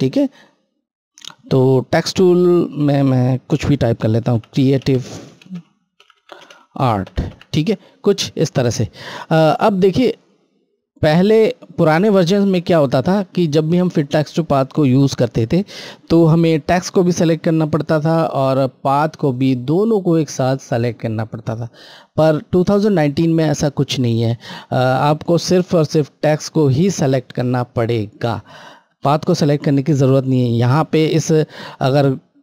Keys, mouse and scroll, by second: 2.4 click, 4.3-5.0 typing, 6.3-7.0 typing, 9.5 click, 9.5 typing, 9.6 click, 12.7 scroll, 12.8 scroll down 1, 19.4 click, 19.5 click, 22.5 click, 23.5 scroll, 23.5 scroll up 1, 25.7 click, 26.1 click, 31.1 scroll, 31.2 scroll down 1.